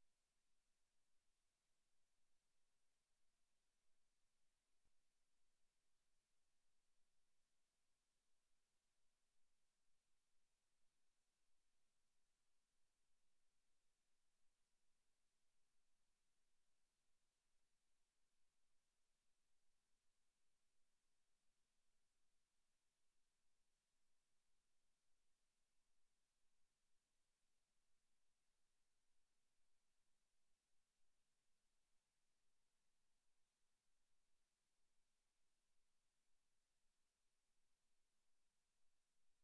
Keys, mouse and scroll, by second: 1.2 click, 2.2 click, 3.2 click, 4.2 click, 5.2 click, 7.2 click, 10.1 right click, 11.1 click, 11.9 click, 14.0 right click, 16.0 click, 16.2 click, 18.1 click, 29.0 click.